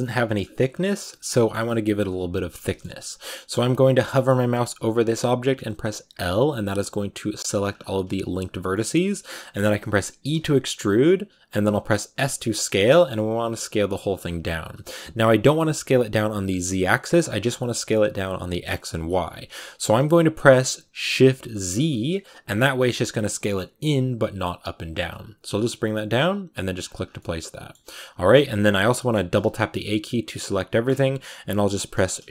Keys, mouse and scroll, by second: 0.6 scroll down 2, 0.7-3.6 middle drag, 3.6 scroll down 1, 4.0-6.1 middle drag, 6.1 l, 6.5 middle click, 7.5-7.9 scroll up 4, 7.9 g, 8.6-10.2 middle drag, 10.2 e, 26.9 scroll down 1, 27.0-29.2 middle drag, 29.2 a, 29.3 a, 29.8-32.3 middle drag.